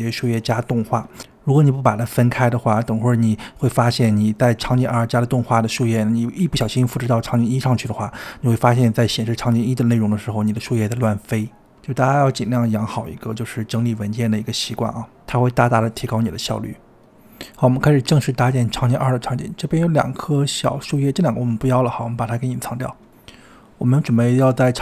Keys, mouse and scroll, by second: 3.0-3.7 scroll down 2, 4.1 click, 5.2 click, 5.5-8.5 drag, 13.3 click, 14.8 click, 15.4-15.8 scroll down 3, 15.8-17.3 middle drag, 17.3-17.9 scroll up 5, 17.9-18.8 middle drag, 18.8-19.6 scroll up 4, 19.6-20.2 scroll down 3, 20.2 click, 21.5 shift+click, 21.6 click, 22.0-23.0 scroll down 5, 23.0-24.1 drag, 24.1-24.8 middle drag.